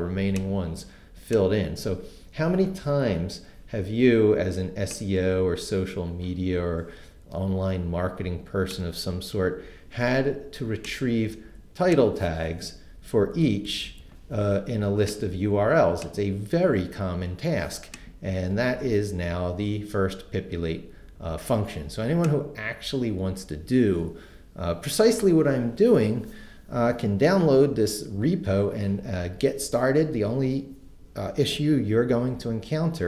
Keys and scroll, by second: 12.9 Down.